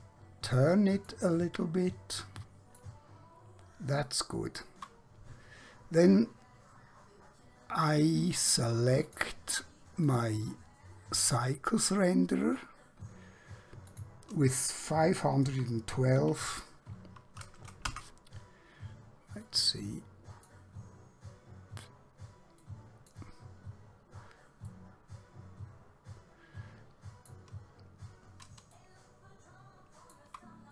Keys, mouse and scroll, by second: 1.4 shift+middle click, 9.1 click, 14.0 click, 15.5-16.5 typing, 17.9 Return, 19.5 middle click, 28.8 shift+middle click.